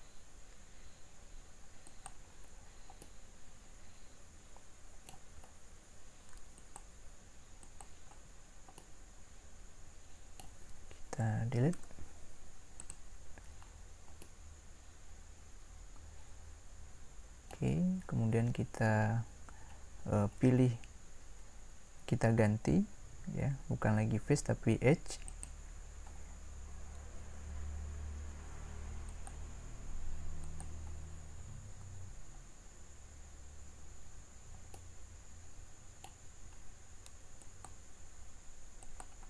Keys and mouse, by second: 2.9 middle click, 3.8-4.8 middle drag, 6.5-9.5 drag, 11.7 Delete, 15.6 middle click, 25.3-28.6 drag, 29.1-33.6 drag, 33.6-35.4 middle drag.